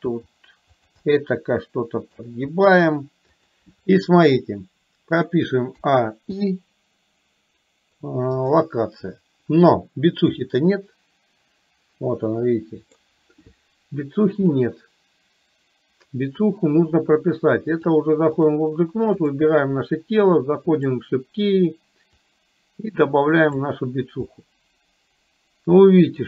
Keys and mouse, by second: 0.3 r, 1.0-2.3 middle drag, 5.8 a, 6.3 i, 10.7-13.2 middle drag, 17.8-18.7 drag, 19.4 click, 22.4-23.7 drag, 24.5-26.2 middle drag.